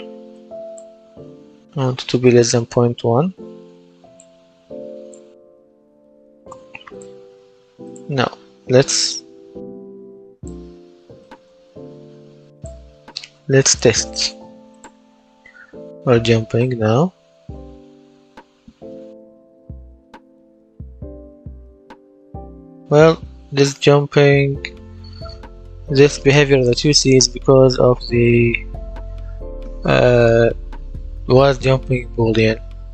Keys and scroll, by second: 1.4 shift+,, 5.6 KP_0, 5.8 KP_Decimal, 6.1 KP_1, 6.3 Return, 15.3 space, 16.8 space, 18.0 space, 19.3 space, 20.4 space, 21.6 space, 23.1 space, 24.2 space, 27.7 w.